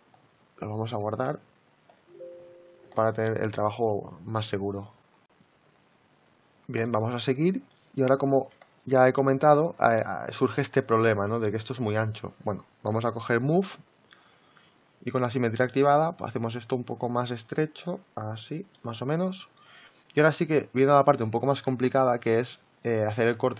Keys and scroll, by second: 8.1 typing.